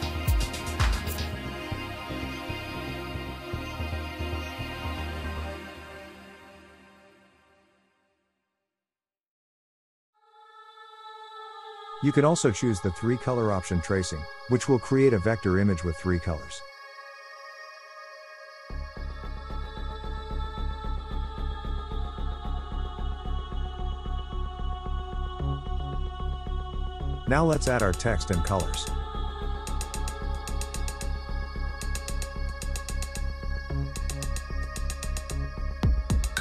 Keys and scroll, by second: 26.9-32.1 typing.